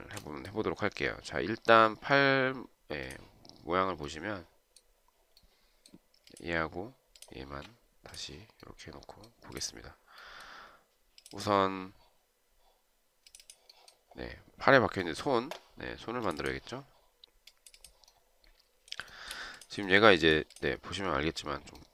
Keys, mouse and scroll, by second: 0.2 shift+right click, 7.5 shift+click, 19.4 shift+right click.